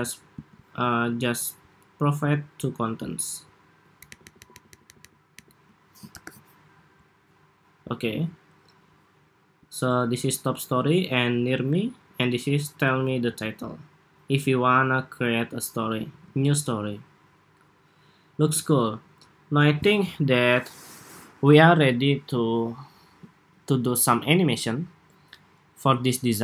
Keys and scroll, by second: 4.3 alt+Up, 4.6 alt+Up, 4.8 alt+Up, 5.4 alt+Up, 6.0 super+-, 15.8 super+s.